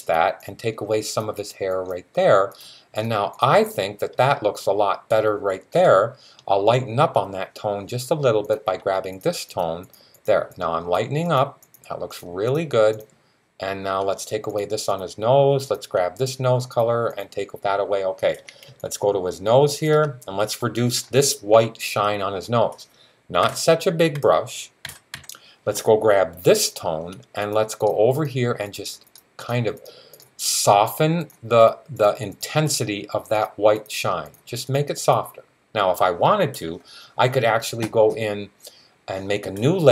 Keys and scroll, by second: 23.2-25.0 typing.